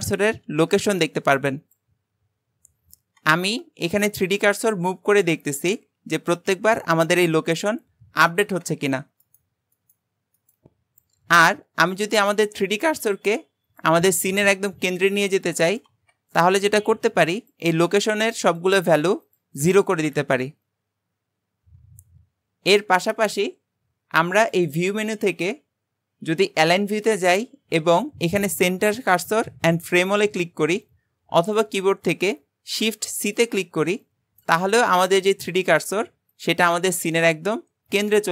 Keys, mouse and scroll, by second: 4.1 shift+right click, 4.8 shift+right click, 5.4 shift+right click, 9.3 shift+right click, 9.8 shift+right click, 10.4 shift+right click, 17.4-18.6 drag, 18.8 click, 19.6-22.6 drag, 22.9 shift+right click, 24.4-27.6 drag.